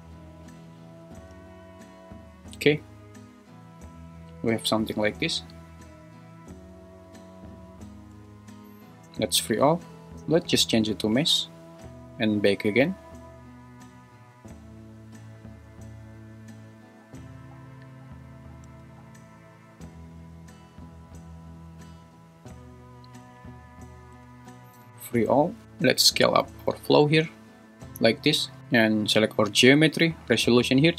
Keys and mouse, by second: 0.8 click, 1.3 space, 8.1 space, 9.3 click, 11.3-24.9 drag, 18.6 space, 24.2 space, 25.4 click, 25.6 `, 26.4 s, 27.7-28.1 drag.